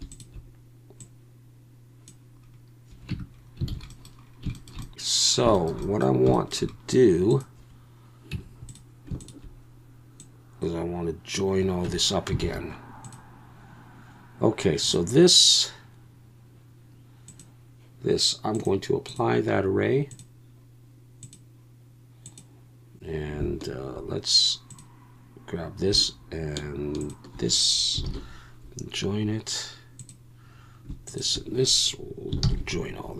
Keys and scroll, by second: 3.1 Tab, 3.7 alt+a, 8.3 Tab, 11.9 Tab, 12.4 alt+a, 28.1 ctrl+j, 32.4 ctrl+j.